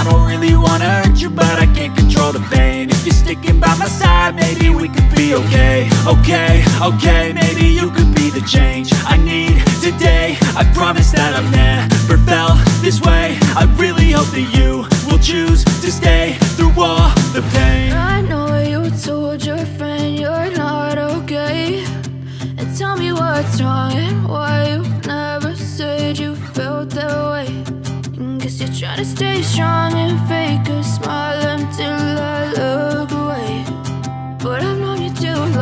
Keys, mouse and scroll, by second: 0.1 click, 0.5 double click, 1.2 click, 3.7 click, 4.1 double click, 5.0 click, 7.9 ctrl+z, 8.1 ctrl+click, 10.6 click, 11.1 double click, 11.8 click, 14.3 click, 14.6 double click, 16.5 click, 16.7 double click, 17.6 click, 18.8 F4, 20.1 F9, 22.0 click, 23.3 click, 25.0 click, 28.5-29.2 scroll down 1, 30.5 click, 30.5 F4, 32.0 F9.